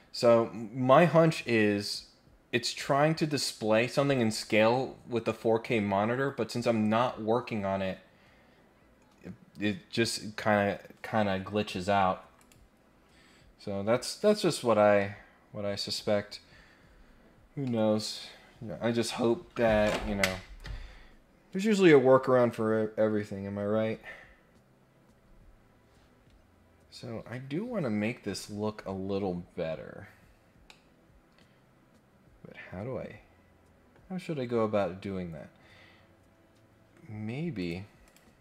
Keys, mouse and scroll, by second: 12.4 click, 13.4 scroll down 1, 15.0 middle click, 17.6 middle click, 29.7 scroll down 2, 30.0-30.7 scroll up 2, 30.7-33.8 middle drag, 37.6 click, 38.0 click.